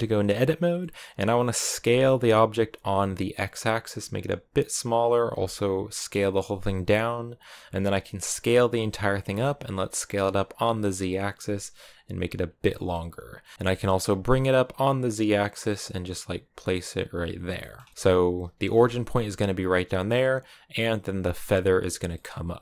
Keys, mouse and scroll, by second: 0.4 scroll up 1, 0.6-1.7 middle drag, 1.7 s, 5.1 s, 7.7-8.3 scroll down 2, 8.3 s, 12.5 middle click, 13.5 g, 17.4 shift+middle click, 17.9-18.3 scroll down 1, 18.3 g, 22.0-22.6 middle drag.